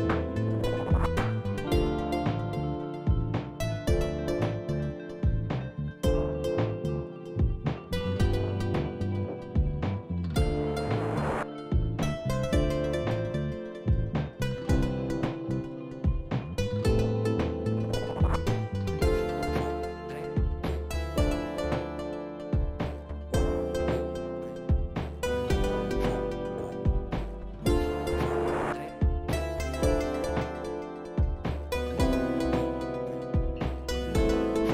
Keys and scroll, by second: 9.3 Up, 10.0 Up, 10.0 Down, 10.2 Down, 28.4 4, 29.0 Return.